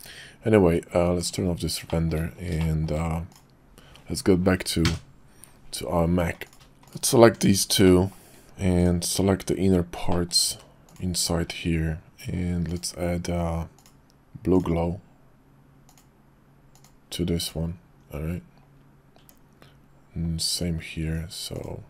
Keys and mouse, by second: 1.1 click, 1.9 shift+click, 2.6 shift+click, 3.3 click, 4.8 KP_Decimal, 6.4 click, 6.5 Tab, 6.8 click, 7.2 Tab, 7.8 middle click, 8.8 click, 10.1 shift+middle click, 10.9 alt+shift+click, 13.7-14.8 drag, 17.4 click, 19.2 Tab, 20.5 Tab, 21.0 Tab, 21.5 click.